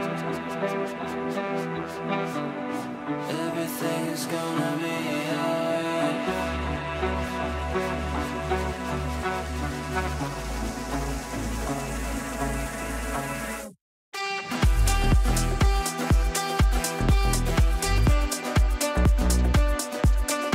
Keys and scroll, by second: 2.8 g, 7.9 g, 14.7 ctrl+g.